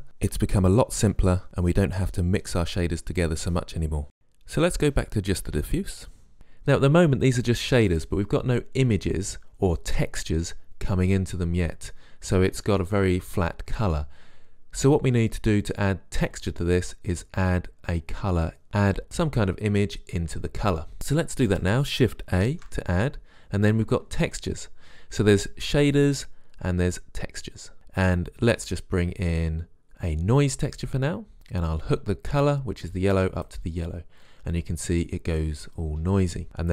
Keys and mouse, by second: 6.0 Delete, 6.0 click, 6.3 click, 22.7 shift+a, 32.2-33.6 drag.